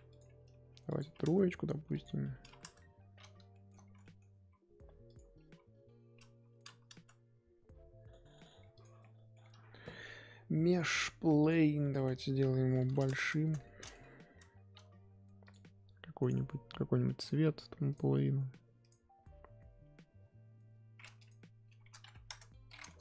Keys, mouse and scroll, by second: 1.2-3.5 drag, 3.5 shift+middle click, 4.4 r, 5.3 r, 8.8 click, 9.0-9.5 middle drag, 9.5 shift+a, 11.8 Tab, 11.9 s, 13.6 middle click, 14.3 Tab, 16.3-17.9 drag, 22.2 click, 22.8-23.0 middle drag.